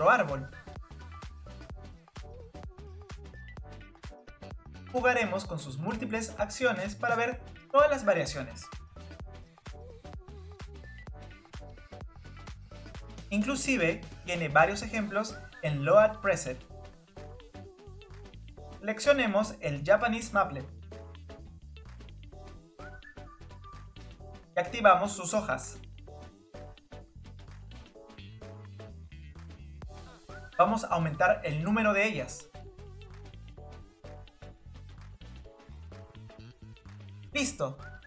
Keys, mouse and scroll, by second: 1.2 click, 2.5-4.0 drag, 4.0 scroll up 2, 5.5-8.3 drag, 9.1 click, 10.0 click, 10.4 click, 11.1 click, 11.7 click, 12.1 scroll down 1, 12.3 middle click, 12.8-21.6 drag, 21.6-24.4 middle drag, 24.4-26.8 drag, 28.8-29.3 scroll down 2, 29.3-32.4 middle drag, 32.5-32.8 scroll up 2, 34.2 click, 35.1 click, 35.9 scroll down 3, 36.0 click, 36.3 KP_0, 36.6 scroll up 2, 36.8 click, 37.1 scroll down 2, 37.3 middle click.